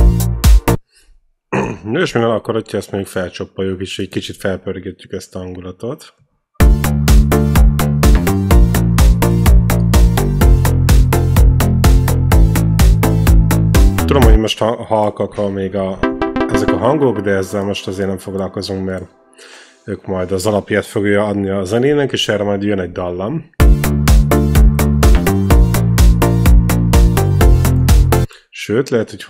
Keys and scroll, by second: 0.5 space, 1.9 ctrl+l, 6.4 space, 14.1 space, 15.7-17.1 typing, 23.4 space, 28.0 space.